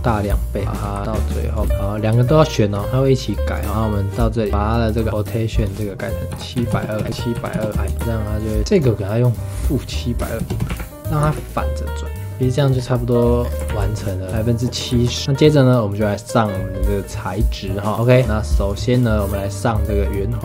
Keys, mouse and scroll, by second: 0.6 click, 0.8 g, 1.6 space, 2.4 shift+click, 3.5-7.0 drag, 7.0 click, 7.8 space, 8.3 click, 8.6 space, 8.7-10.7 drag, 11.2 space, 12.8-13.4 scroll up 2, 13.4-13.7 scroll down 3, 13.7 ctrl+s, 14.4 shift+middle click, 14.9 ctrl+s, 15.3 scroll up 1, 18.0 click, 18.6 click, 19.2 click.